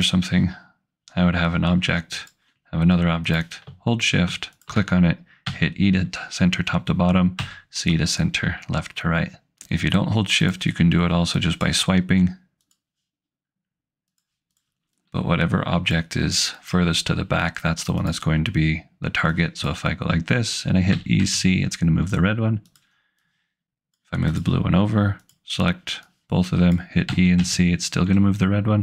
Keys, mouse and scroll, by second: 2.2 click, 4.6 shift+click, 5.5 e, 7.4 c, 10.5 click, 12.2 click, 14.5 click, 18.0 click, 20.0 click, 20.9 e, 21.1 c, 22.7 click, 23.4 click, 24.6 click, 25.4 click, 27.1 e, 27.4 c.